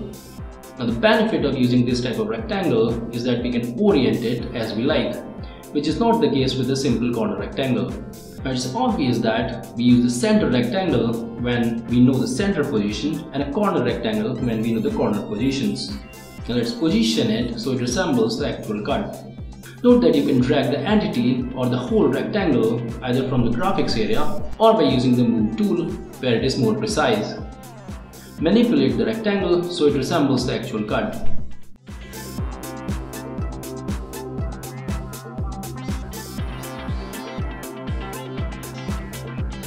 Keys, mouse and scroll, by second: 7.1-11.0 right drag, 11.0 click, 13.2 click, 15.0 click, 15.9 click, 22.2-25.8 drag, 27.5-30.5 drag, 30.5 middle click, 31.0 click, 31.2 middle click, 32.0 click, 32.0 Return, 32.4 click, 32.5 click, 33.0 click, 33.8 click, 34.3 click, 34.6 click, 35.4 middle click, 35.6 click, 35.8 middle click, 36.3 click, 37.9 click, 38.1 click, 39.4 click.